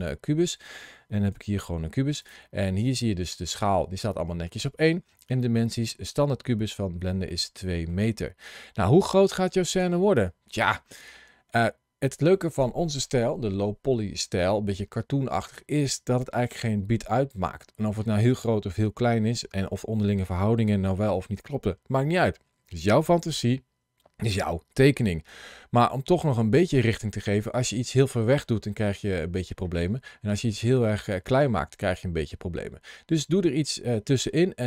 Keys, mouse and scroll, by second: 1.2 g, 2.1 click, 5.2 click, 7.1 middle click, 8.4 scroll down 1, 9.1 scroll down 1, 10.0 click, 10.8-11.1 scroll down 2, 14.8-18.2 scroll up 2, 24.9-25.9 scroll down 2, 28.4 scroll up 1, 29.4-30.3 scroll up 1, 32.0 scroll down 2, 33.9-34.5 scroll up 2, 34.5 middle click.